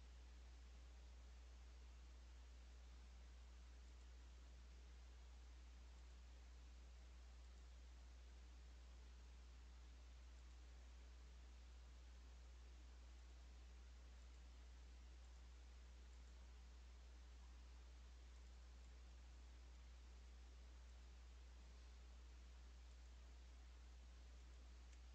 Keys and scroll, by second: 5.0 Escape, 12.3 Escape, 17.8 Escape, 24.6 Escape.